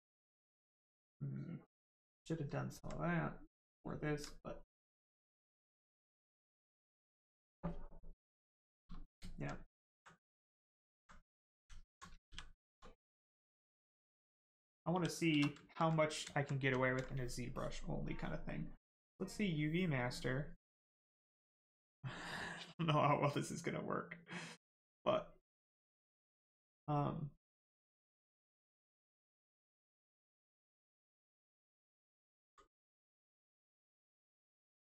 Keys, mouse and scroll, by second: 2.7 alt+right click, 4.4 right click, 4.4 right click, 8.6 right click, 9.2 alt+right click, 9.5 right click, 9.6 right click, 9.9 alt+right click, 10.1 right click, 10.2 right click, 11.0 alt+right click, 11.2 right click, 11.8 alt+right click, 13.0 right click, 14.2 alt+right click, 14.6 shift+right click, 14.9 shift+f, 15.3 shift+f, 16.3 alt+right click, 17.5 right click, 17.6 click, 28.3 click, 30.6 click, 33.7 click.